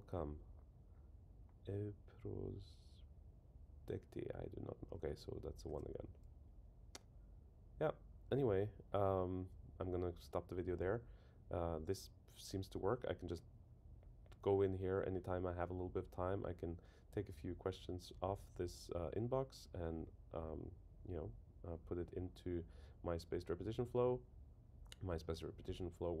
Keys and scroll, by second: 5.7 super+1.